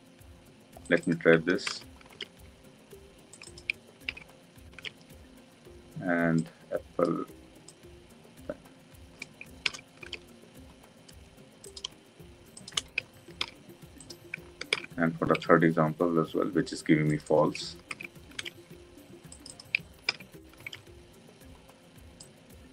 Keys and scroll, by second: 4.0 ctrl+v, 13.3 ctrl+v, 14.6 ctrl+d, 18.4 ctrl+d, 20.0 ctrl+v.